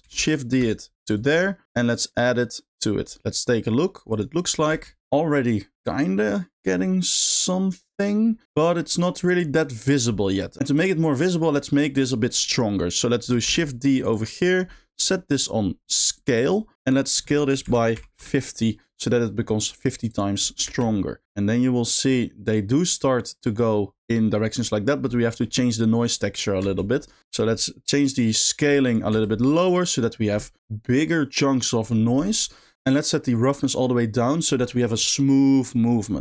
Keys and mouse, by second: 0.0 shift+d, 0.6 click, 1.1 click, 1.6 middle click, 1.9 click, 2.1-2.8 drag, 4.1 click, 4.8 space, 8.7 middle click, 10.5 click, 10.6 g, 10.6 space, 10.7 click, 11.2 middle click, 12.5 click, 13.5 shift+d, 14.0 click, 15.0 click, 15.4-16.3 drag, 17.2-18.2 drag, 20.1 click, 20.7 space, 25.2 middle click, 26.7 space, 27.3 middle click, 28.9 click, 33.5 click.